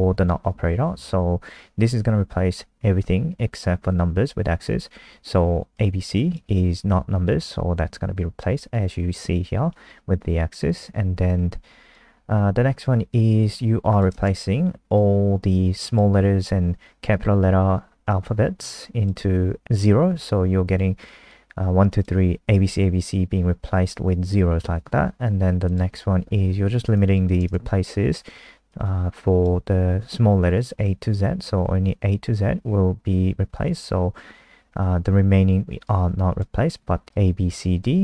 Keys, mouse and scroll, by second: 14.1 click, 26.6 click, 28.7 click.